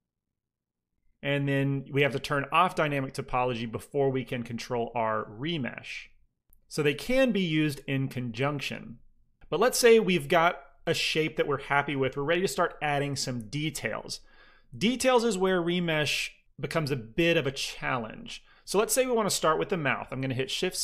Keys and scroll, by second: 2.2 ctrl+d, 4.6 ctrl+r, 19.9-20.8 typing.